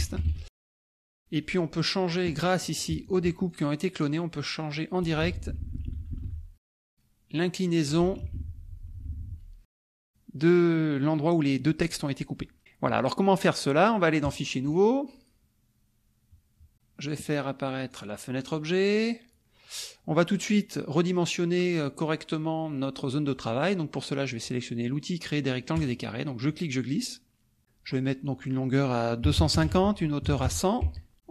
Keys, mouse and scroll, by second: 0.0-0.7 typing, 1.2 click, 2.1 click, 2.7 click, 3.0 shift+click, 3.5 shift+click, 5.3 Up, 7.3 click, 8.2 Down, 12.0 click, 12.6 click, 14.2 click, 14.7 click, 16.7 right click, 17.0 click, 17.9 click, 18.5 click, 25.7 click, 26.5-27.6 drag, 28.2 click, 29.2 KP_2, 29.4 KP_5, 29.5 KP_0, 29.7 Tab, 30.2 KP_1, 30.8 Tab, 31.1 click.